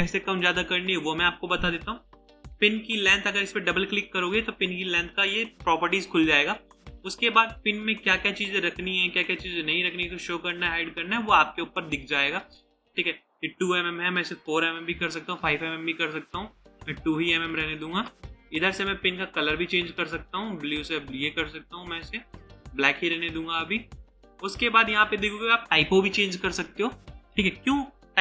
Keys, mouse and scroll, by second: 15.4 Return, 16.8 2, 17.5 Return, 24.7-25.5 scroll down 1.